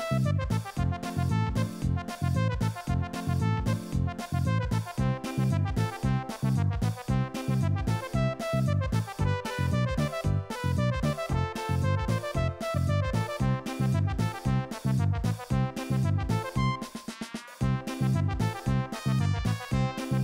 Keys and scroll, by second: 0.0 alt+shift+Left, 0.7 super+z, 2.0 Escape, 3.0 Tab, 4.0 Tab, 6.9 ctrl+r, 8.2 super+b, 10.1 super+b, 12.0 super+b, 14.1 Return, 15.0 super+c, 15.2 super+v, 15.4 alt+shift+Left, 18.8 Return, 19.1 Escape, 19.3 alt+Return.